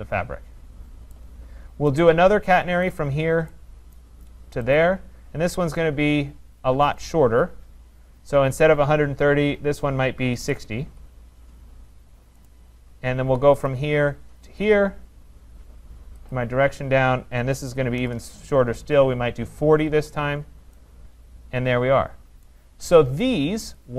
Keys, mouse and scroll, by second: 1.2 right click, 2.0 right click, 2.9 click, 4.0 right click, 4.8 click, 7.1 click, 10.4 typing, 10.9 Return, 12.5 right click, 13.7 click, 14.6 click, 16.4 click, 18.0-18.7 typing, 20.6 Return, 22.5 right click, 22.8 middle click, 22.9 middle click, 23.1 middle click, 23.8 click.